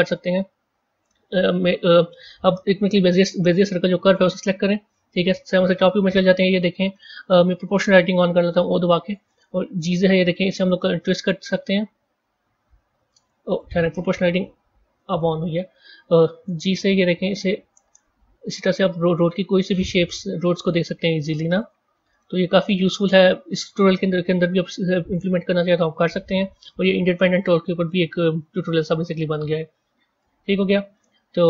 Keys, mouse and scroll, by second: 3.4 click, 4.3 Tab, 5.4 KP_7, 5.7-7.0 scroll down 3, 7.0 click, 8.5 0, 9.4 g, 14.9 o, 16.2 g, 21.5 click, 21.9 g, 23.6 click, 24.4 g, 25.8 click, 26.6 g, 27.7-30.1 middle drag, 30.1 Tab, 30.8-31.4 middle drag.